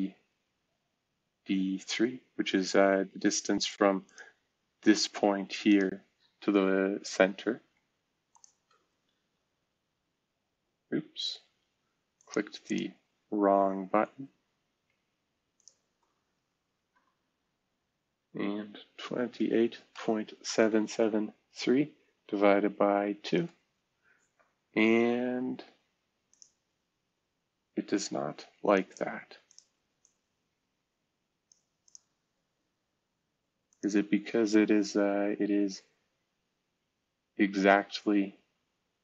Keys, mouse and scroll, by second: 0.0-1.3 scroll down 2, 1.3-2.4 scroll down 2, 2.4-4.0 scroll up 2, 4.6-5.4 scroll up 1, 5.4 scroll up 1, 6.1-7.4 scroll down 1, 7.4-8.4 scroll up 1, 9.0 x, 11.2 Escape, 16.7 v, 19.0-22.3 typing, 23.3 Return, 27.2 scroll down 2, 28.0-28.5 scroll up 2, 32.6-33.6 scroll up 1, 34.2-34.8 scroll down 3, 35.8 scroll down 2, 36.9-37.5 scroll up 2, 37.5-38.6 scroll down 2.